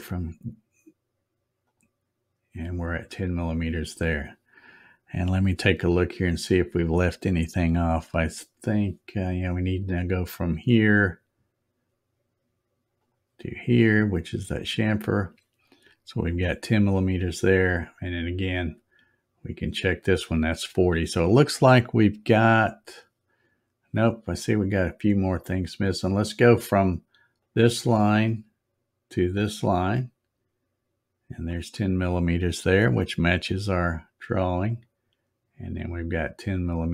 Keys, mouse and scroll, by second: 1.6 click, 2.9 click, 10.3 click, 13.0 click, 14.1 click, 18.6 click, 19.7 click, 27.4 click, 29.1 click, 31.2 click, 34.6 click, 36.6 click.